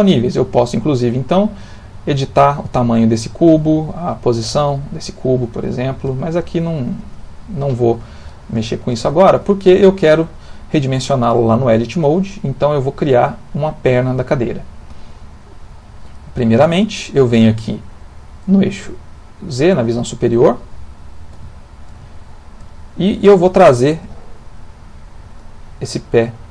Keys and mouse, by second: 0.8 click, 4.1 click, 7.0 Escape, 17.4 middle click, 19.1 click, 20.9 ctrl+middle click, 21.5 shift+middle click, 22.1 ctrl+middle click, 23.5 g.